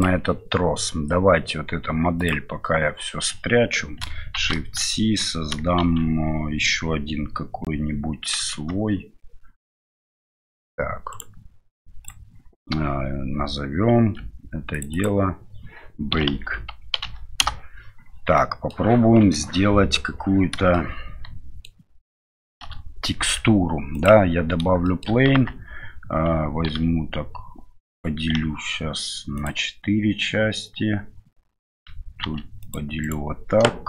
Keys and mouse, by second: 2.2-4.1 drag, 4.3 shift+c, 4.9-6.8 middle drag, 8.6 m, 11.1-12.1 right drag, 14.7-18.0 drag, 18.3 middle click, 19.2 KP_7, 20.7-21.6 shift+middle drag, 22.6 shift+a, 24.8 middle drag, 25.3 Tab, 26.7 ctrl+r, 28.3 w, 32.2 ctrl+r.